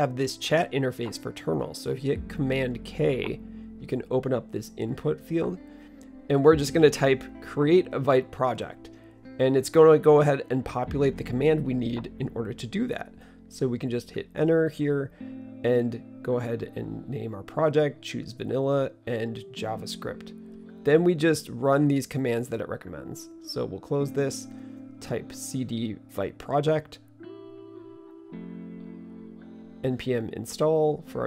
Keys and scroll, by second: 4.4 super+k, 7.9-11.6 typing, 14.8-15.6 typing, 16.7-19.9 typing, 19.9 Return, 25.2-31.2 typing.